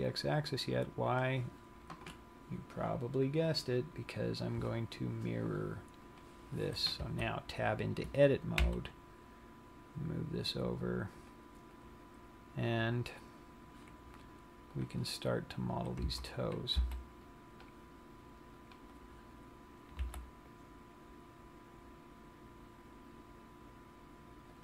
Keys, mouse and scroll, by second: 1.9 click, 4.9 click, 7.4 Tab, 9.1 g, 11.6 click, 12.3 scroll up 5, 15.2 click, 16.6 a, 17.4 c, 19.6 right click, 20.4 s.